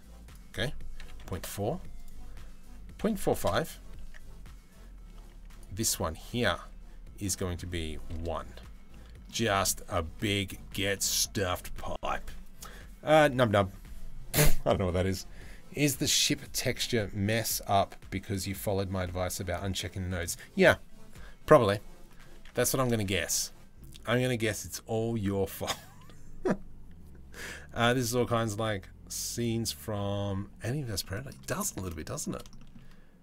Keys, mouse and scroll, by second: 1.7-3.1 drag, 3.6 Tab, 4.9 Tab, 5.1 click, 7.0 Tab, 7.0 click, 8.5 middle click, 9.9 middle click, 10.6 middle click, 22.0 Tab, 23.2 ctrl+s, 30.6 middle drag, 31.3 shift+middle click, 31.5 middle drag, 32.2 shift+middle click, 32.8 click.